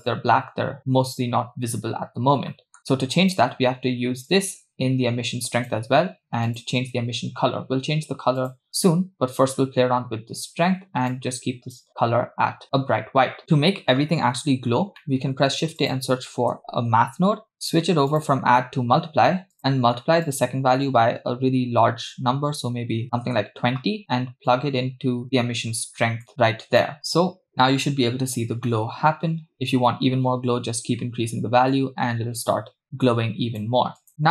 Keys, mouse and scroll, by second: 1.1-2.0 scroll down 6, 2.5 middle click, 2.9 click, 4.3-5.9 drag, 6.5 click, 13.3 click, 14.7 scroll up 2, 15.0 middle click, 15.4 shift+a, 18.1 click, 19.5 click, 20.3-23.3 drag, 24.5-26.9 drag, 27.0 middle click, 27.0 scroll down 2, 28.7 middle click, 29.2-29.6 scroll up 2, 29.6-33.7 drag, 34.0 click, 34.1-34.3 scroll down 2.